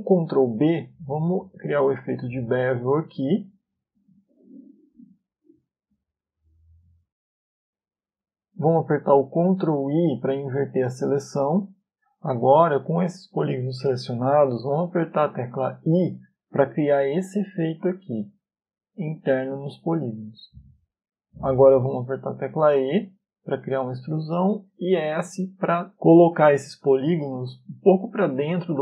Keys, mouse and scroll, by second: 1.5 ctrl+b, 11.0 ctrl+i, 13.5 middle click, 18.2 i, 23.7 e, 26.3 s.